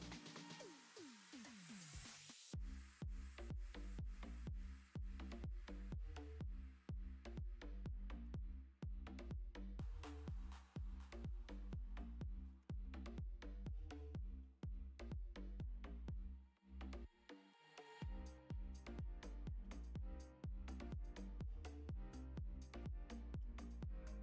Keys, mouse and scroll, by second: 0.0 click, 2.0 click, 2.8 click, 4.4 click, 6.0 click, 6.9 click, 9.0 z, 10.2 click, 13.3-13.6 middle drag, 13.6-14.4 scroll up 9, 13.9 shift+middle drag, 14.4-15.4 middle drag, 17.5-17.8 middle drag, 17.9-18.9 middle drag, 19.0 middle click, 19.2-19.6 scroll up 2, 19.2 Tab, 19.6 middle click, 20.1 click, 21.2-21.7 middle drag, 22.2-23.4 middle drag, 23.5-24.2 middle drag.